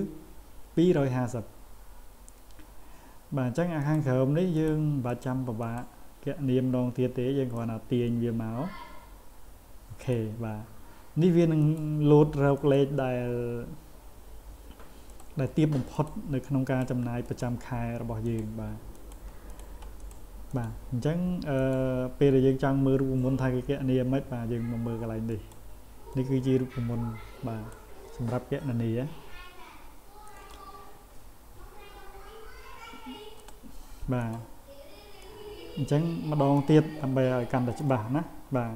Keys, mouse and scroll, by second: 3.8 click, 4.6 click, 5.1 click, 5.6 click, 7.6-10.1 drag, 11.6 click, 12.6 click, 15.1 click, 16.0 click, 16.7 click, 17.3 click, 18.3 click, 19.0 click, 19.5 click, 20.0 click, 20.5 click, 21.6 click, 25.3 click, 26.1-27.7 drag, 30.3 click, 34.2 click, 35.2-36.6 drag.